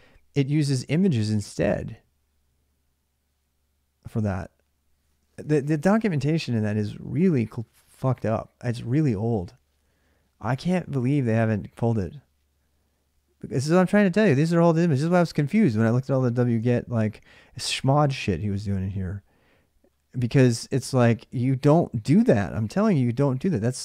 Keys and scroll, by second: 16.4 alt+Tab.